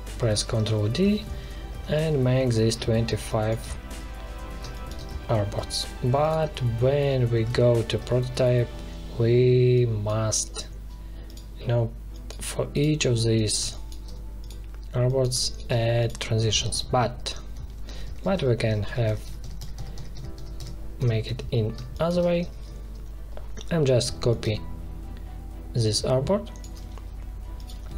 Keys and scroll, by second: 0.1 ctrl+d, 3.0 space, 7.3 alt+2, 13.5 space, 15.2 space, 16.7 ctrl+z, 21.7 space.